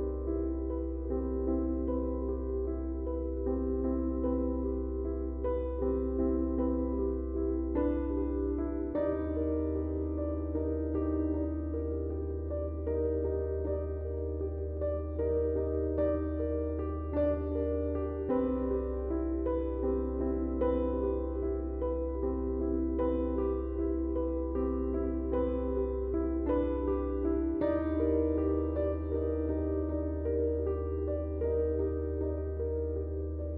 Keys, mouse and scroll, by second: 1.3 click, 5.9-27.5 drag, 14.3 typing, 27.9 right click.